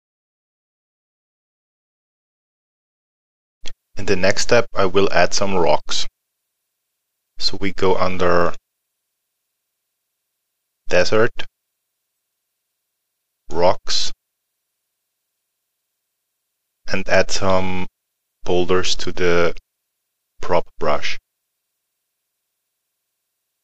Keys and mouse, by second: 0.0 click, 0.5 middle click, 0.6 click, 2.4 middle click, 8.4 click, 19.0 click, 22.8 click.